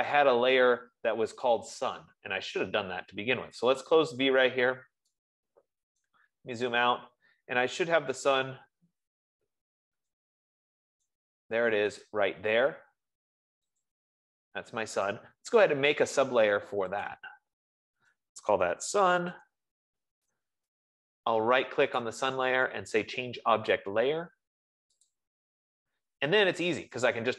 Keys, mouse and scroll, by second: 4.4-5.8 drag, 7.0 right click, 7.6 scroll, 8.4-9.4 scroll, 8.7 middle click, 9.7 scroll down 7, 10.4-10.8 scroll up 1, 11.9 right click, 12.5 click, 12.5 scroll, 14.3 click, 17.7 click, 19.0-20.6 typing, 22.6 right click, 25.4 click.